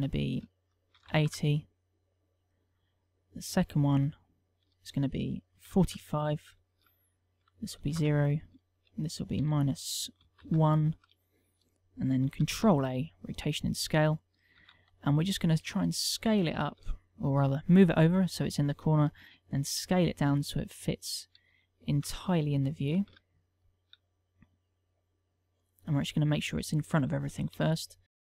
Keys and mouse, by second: 0.9 ctrl+click, 3.0 click, 3.5 click, 5.4 ctrl+click, 7.4 ctrl+click, 9.3 ctrl+click, 13.2 ctrl+a, 15.3 g, 20.4 s, 21.4 click, 22.1 s, 24.7 g, 25.8 click, 26.4 middle click, 28.1 g.